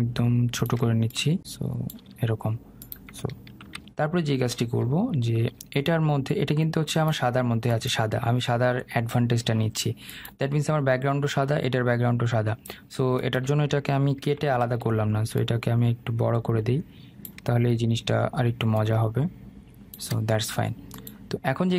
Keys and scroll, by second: 3.6 ctrl+0, 14.2 ctrl+t.